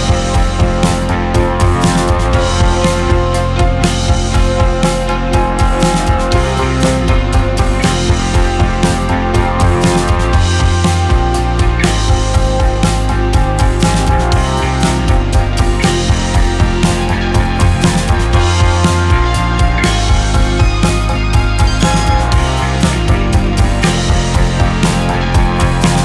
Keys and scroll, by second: 3.0 space, 4.1 c, 4.7 Escape, 9.5 shift+F2, 17.8 F4, 18.2 F3, 22.2 shift+F2, 23.5 F9.